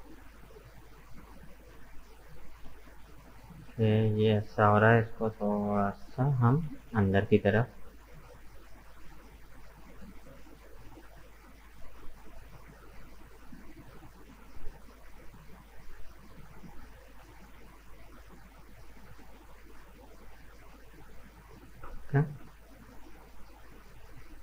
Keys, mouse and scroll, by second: 3.4 right click, 4.2 right click, 4.6-6.4 middle drag, 6.4 g, 10.3-13.3 middle drag, 14.0-14.3 scroll down 1, 14.3-16.6 middle drag, 16.6 alt+right click, 17.3 g, 20.0 Tab, 20.1 right click, 20.5 middle click, 21.5-21.9 scroll down 2, 21.9-24.2 middle drag, 24.2-24.4 scroll up 2.